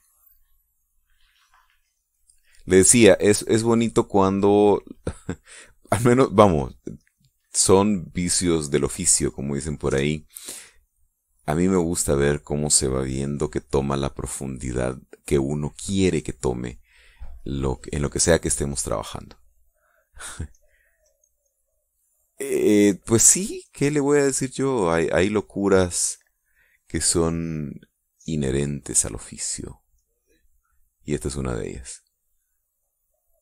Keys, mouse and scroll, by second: 1.8 click, 2.8-4.4 drag, 4.7 click, 5.2-6.6 drag, 7.4-8.6 drag, 8.8 click, 11.4 click, 18.1 click, 19.4-22.4 drag, 23.6-26.0 drag, 26.1-27.8 drag, 29.4-32.7 drag.